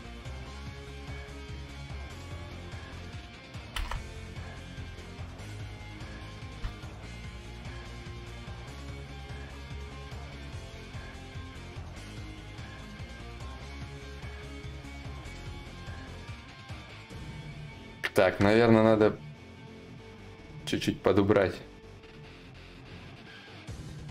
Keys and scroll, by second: 3.3 ctrl+z, 3.3 ctrl+y.